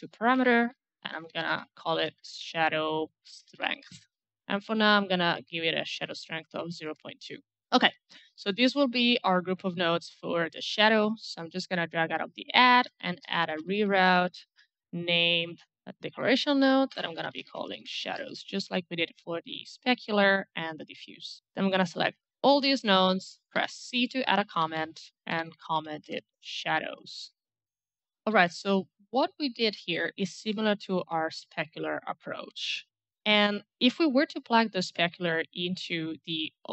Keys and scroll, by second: 0.2-4.0 typing, 6.4 KP_Decimal, 6.5 KP_2, 6.7 Return, 12.6-14.5 typing, 14.9 Up, 15.6 Return, 16.6 shift+Left, 16.7-18.1 typing, 23.6 c, 24.7-26.3 typing.